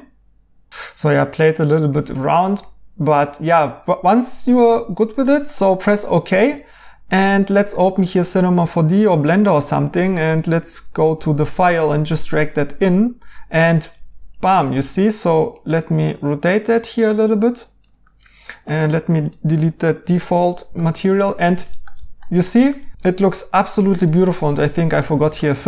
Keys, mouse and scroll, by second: 0.7 right click.